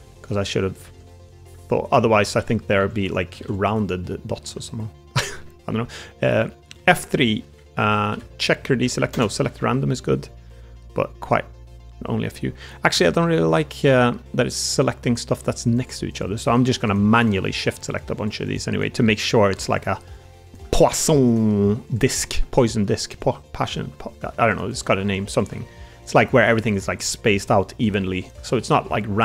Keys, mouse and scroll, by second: 0.0 ctrl+r, 0.0 click, 0.8 ctrl+r, 3.9 ctrl+r, 3.9 click, 4.1 middle click, 4.3 3, 4.7 click, 5.0 middle click, 6.4 middle click, 6.7 F3, 14.1 middle click, 15.0 middle click, 15.0 3, 17.3 middle click, 19.1 middle click, 20.6 middle click, 22.2 shift+middle click, 22.4 middle click, 23.5 shift+click, 23.9 middle click, 24.8 shift+click, 25.5 middle click, 26.9 middle click, 28.4 middle click.